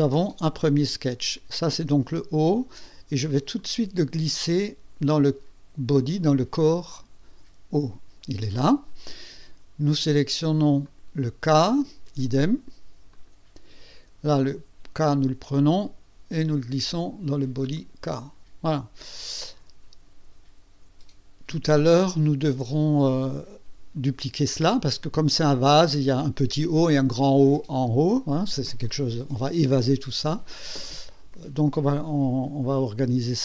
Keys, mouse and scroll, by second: 3.6-6.8 drag, 10.9 click, 13.1 click, 15.0-17.2 drag, 17.8 click.